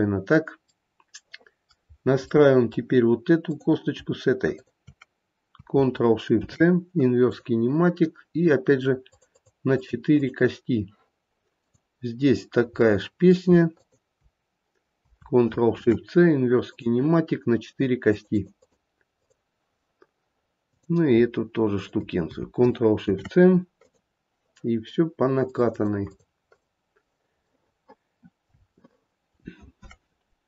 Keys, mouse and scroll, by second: 0.8 middle click, 1.5 middle click, 1.9-2.3 scroll down 1, 2.3 middle click, 3.5 click, 4.5 shift+click, 6.4 ctrl+shift+c, 9.1 click, 9.4 click, 9.7 click, 12.9 middle click, 13.7 shift+click, 15.8 ctrl+shift+c, 18.1 click, 18.4 click, 18.6 click, 21.8 shift+click, 23.1 ctrl+shift+c, 25.5 click, 25.7 click, 26.1 click, 27.6 middle click, 28.4 middle click, 28.9 shift+middle click.